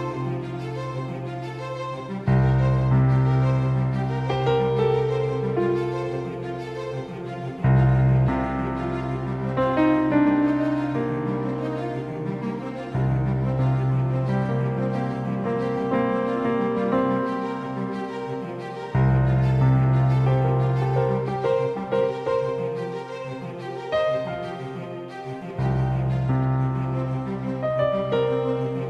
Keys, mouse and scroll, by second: 0.4 a, 1.5 z, 2.0 c, 8.3 a, 8.7 a, 9.6 a, 10.9 KP_5, 11.7 KP_5, 13.3 KP_1, 14.1 KP_3, 17.7 a, 18.1 a, 19.5 z, 21.6 z, 23.5 c.